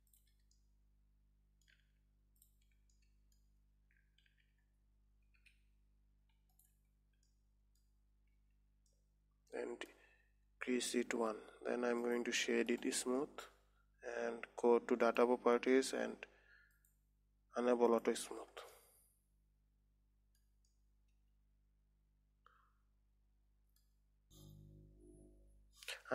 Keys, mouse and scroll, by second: 0.6 alt+shift+click, 1.1-2.8 middle drag, 2.8 alt+shift+click, 3.4-4.7 middle drag, 4.7 shift+e, 7.8-8.8 middle drag, 8.8 Tab, 9.3-12.4 middle drag, 12.5-15.5 right drag, 15.5 click, 16.2-17.0 scroll down 2, 17.2-18.4 drag, 19.3-24.2 middle drag, 25.4 middle click.